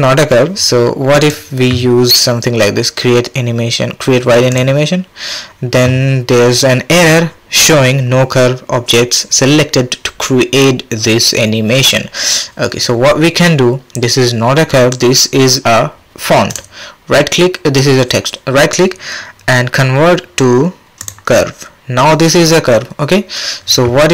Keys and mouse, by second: 1.2-5.6 drag, 16.6-19.4 drag.